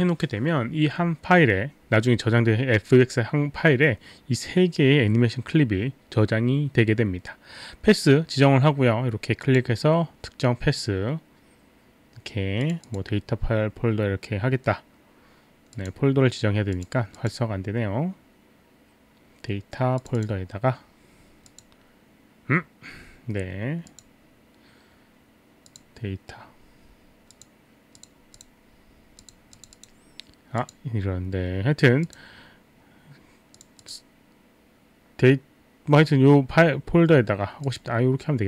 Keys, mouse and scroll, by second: 9.4 click, 12.6 click, 12.8 click, 15.8 click, 16.8 click, 17.2 click, 20.0 click, 21.5 click, 23.9 click, 25.6 click, 27.4 click, 27.9 click, 28.4 click, 28.9 click, 29.2 click, 29.6 click, 29.8 click, 30.6 click, 30.7 click, 32.1 click, 33.6 click, 33.8 click, 37.7 click.